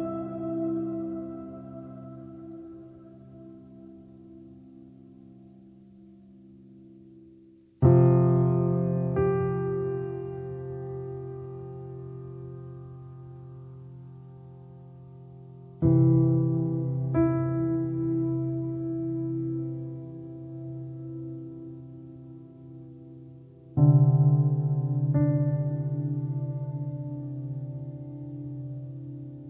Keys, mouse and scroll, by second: 0.3-5.8 ctrl+drag, 5.8 scroll down 2, 6.2-7.9 middle drag, 7.9 click, 8.2-11.0 middle drag, 11.0 shift+click, 11.3 shift+middle click, 11.8 shift+d, 12.7 click, 13.9 click, 15.1 shift+click, 15.6 ctrl+l, 15.8 click, 16.0 click, 16.1 alt+middle click, 16.4 alt+middle click, 16.6-17.1 alt+scroll up 3, 17.1 shift+middle click, 17.9 click, 18.7 shift+middle click, 21.1 shift+middle click, 21.2-22.0 shift+scroll up 3, 22.0-23.2 drag, 23.2 ctrl+z, 23.5-24.7 drag, 24.7 ctrl+z, 27.0 f, 28.0-28.5 scroll down 2, 28.5-29.1 scroll up 6, 29.1 f.